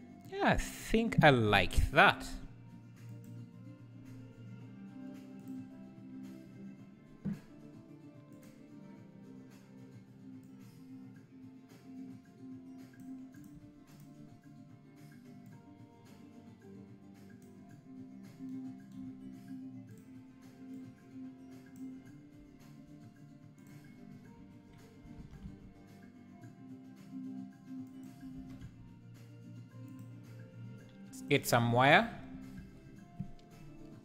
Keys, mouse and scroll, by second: 3.4 click, 5.5 click, 8.3 click, 10.5-14.0 drag, 15.5-20.7 drag, 23.7 shift+click, 24.1 scroll down 2, 25.2 alt+d, 28.4 alt+d, 32.8-34.0 drag.